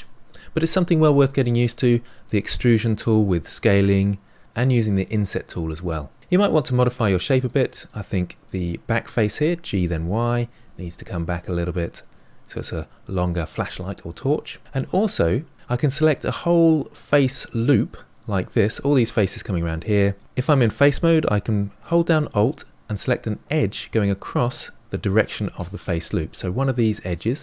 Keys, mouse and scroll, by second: 6.2-7.8 middle drag, 7.8 click, 7.9-9.6 scroll down 1, 9.6 g, 11.7-12.1 scroll down 4, 12.1-14.4 middle drag, 14.4-16.6 scroll up 5, 27.2 alt+click.